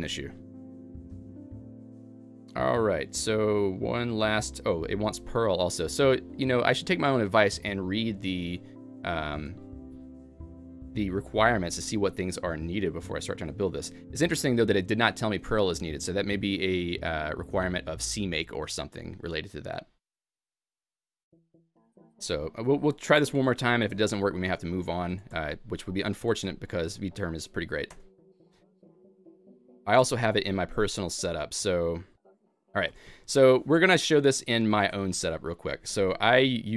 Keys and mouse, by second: 0.0-0.7 typing, 1.8-3.4 typing, 5.1-5.9 typing, 22.1-25.5 typing, 26.6 alt+x, 26.6 Return, 26.6 y, 27.9 Return, 28.5-32.3 typing, 33.5 Escape, 34.3-35.8 typing, 34.4 Escape, 34.4 click.